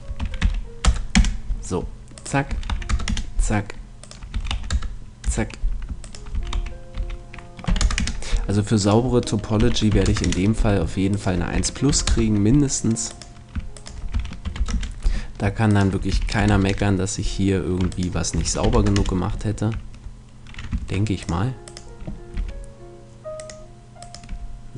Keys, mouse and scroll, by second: 0.2 s, 2.2-3.9 right drag, 2.5 s, 4.0-5.8 right drag, 4.3 s, 6.1-7.7 right drag, 6.3 s, 8.8-10.6 right drag, 9.6 s, 11.1-13.0 right drag, 11.5 s, 13.2-15.6 right drag, 15.5 middle click, 15.7-17.5 right drag, 16.1 s, 17.9-19.7 right drag, 18.4 s, 20.8 ctrl+Tab, 21.7-23.5 right drag, 22.4 g, 24.0 right click, 24.3 g.